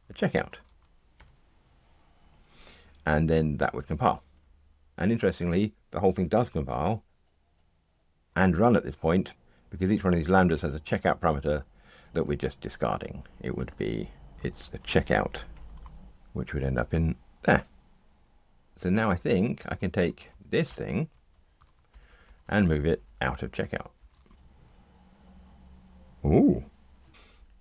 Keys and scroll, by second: 1.1 Escape, 6.3 ctrl+r, 16.1 alt+shift+Right, 16.8 super+v, 18.7 Escape, 20.3 alt+Up, 21.6 super+x, 24.3 ctrl+r.